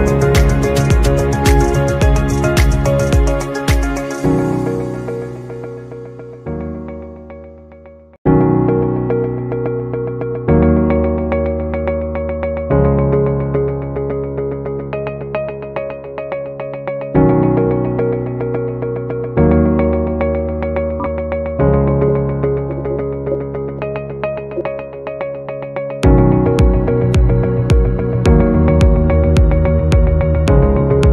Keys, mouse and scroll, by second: 1.9 shift+click, 3.3 shift+click, 6.8 Delete, 16.4 alt+scroll down 1, 17.8 double click, 18.8-19.3 BackSpace, 19.5 BackSpace, 21.2-24.4 typing, 27.1 right click.